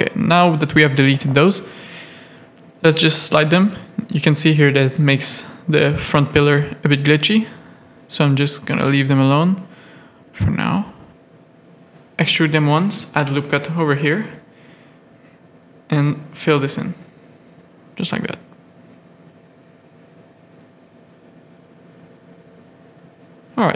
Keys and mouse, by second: 0.6 KP_3, 1.0 middle click, 1.4 z, 1.8 g, 5.3 z, 5.9 a, 6.4 middle click, 7.2 click, 8.0 z, 9.5 KP_3, 10.5 e, 12.4 ctrl+r, 14.3 middle click, 15.2 2, 15.8 f, 15.9 middle click, 16.3 1, 17.2 shift+click, 17.5 g, 18.2 Tab, 18.7 alt+a, 19.3 z, 19.7-21.1 middle drag, 21.5 middle click, 22.4 middle click, 22.7 shift+middle click, 23.2 Tab, 23.5 middle click.